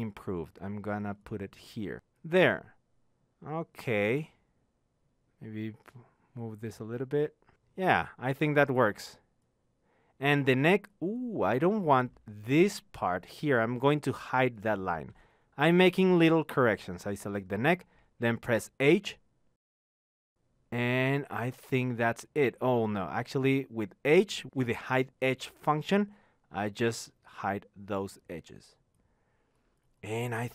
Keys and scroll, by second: 1.1 t, 24.9 h.